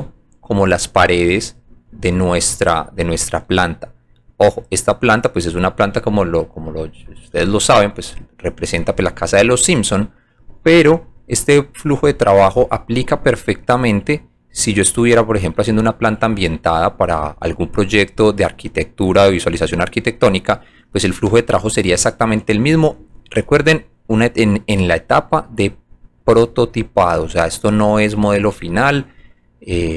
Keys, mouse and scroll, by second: 0.8 click, 1.4 alt+middle click, 1.8 alt+middle click, 2.1 alt+right click, 2.6 alt+click, 4.5 alt+drag, 6.5 alt+click, 7.3 alt+click, 7.7 alt+middle click, 8.4 alt+right click, 9.0 alt+middle click, 9.7 alt+middle click, 10.4 alt+middle click, 10.9 alt+right click, 12.4 alt+click, 13.7-14.9 drag, 15.7 alt+click, 17.2 alt+click, 18.1 click, 19.1-19.8 drag, 21.5 alt+middle click, 22.1 alt+right click, 22.7 alt+click, 23.1 alt+right click, 24.4 alt+click, 26.4 alt+click, 27.0 alt+middle click, 27.8 alt+click, 29.4 alt+click.